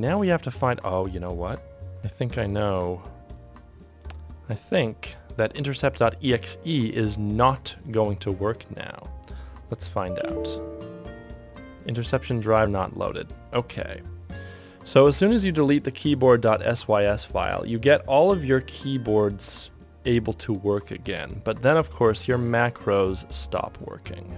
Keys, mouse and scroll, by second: 2.0 super+d, 9.9 y.